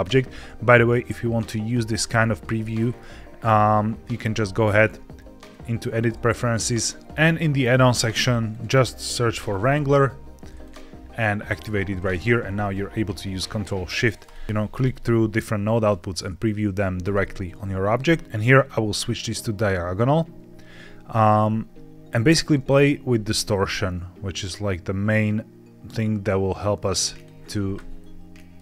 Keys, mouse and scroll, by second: 1.9 ctrl+shift+click, 2.8 ctrl+shift+click, 4.6 click, 14.1 ctrl+shift+click, 14.6 ctrl+shift+click, 15.7 ctrl+shift+click, 16.9 ctrl+shift+click, 18.4-19.6 drag, 23.1-27.2 shift+drag, 27.9 shift+middle click.